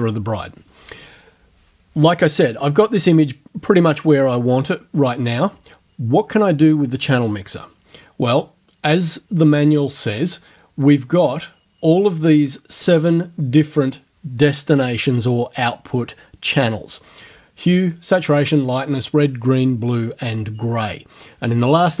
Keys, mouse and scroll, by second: 9.8 click.